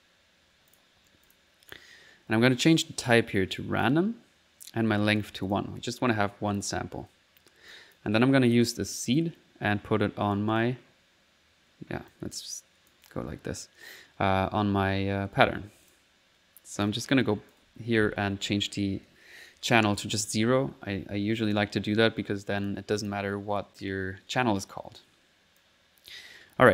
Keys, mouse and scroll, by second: 0.7 click, 1.3 click, 1.7 middle click, 1.9 click, 1.9 middle click, 3.1 click, 3.8 click, 5.0 click, 6.0 middle click, 7.7 click, 8.5 click, 9.2-10.4 drag, 12.1 click, 13.0 click, 15.9 click, 16.9-18.1 drag, 21.5 click, 22.6-23.7 drag, 25.6 click.